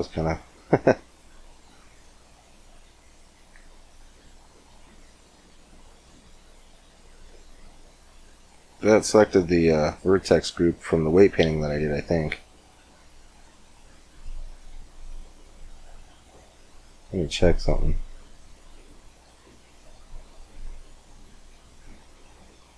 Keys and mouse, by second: 1.6-3.3 drag, 3.5-6.8 middle drag, 8.3-13.1 middle drag, 18.2-22.7 drag, 20.3 Tab.